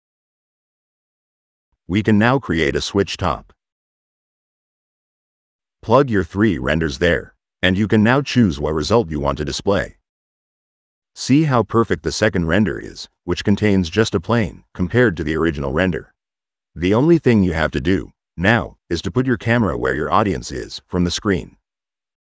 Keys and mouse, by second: 1.2 click, 2.7 w, 3.4 click, 4.5 click, 5.8 click, 6.3 click, 7.1 click, 7.7-8.5 drag, 9.5 middle click, 9.6 click, 10.3 middle click, 10.5 right click, 10.5 click, 11.1-12.9 drag, 16.1 click, 17.1-19.5 drag.